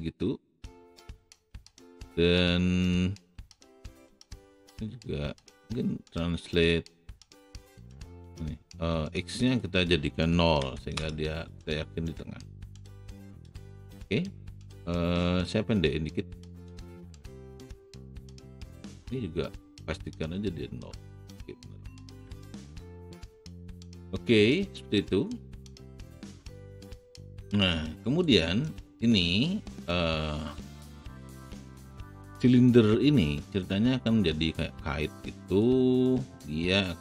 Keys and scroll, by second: 3.9 w, 10.6 KP_0, 10.8 Return, 14.1 r.